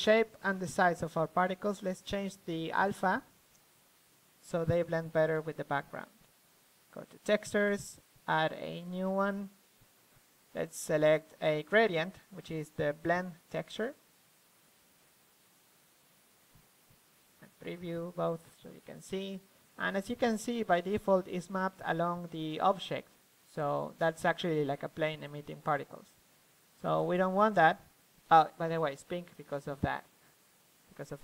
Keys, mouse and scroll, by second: 1.7-4.0 drag, 6.4 F11, 7.3 middle click, 8.4-9.8 drag, 10.1-15.8 drag, 16.9-19.8 middle drag, 19.8-26.4 drag, 26.4-29.9 middle drag, 30.0-31.2 middle drag.